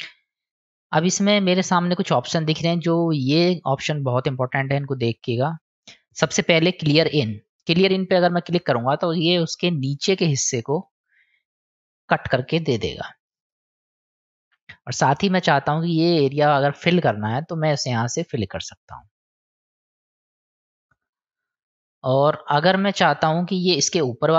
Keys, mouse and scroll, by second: 5.5 middle click, 11.5 click, 12.5-15.4 middle drag, 18.1 click, 18.9-21.1 drag, 22.3 click, 23.0 click.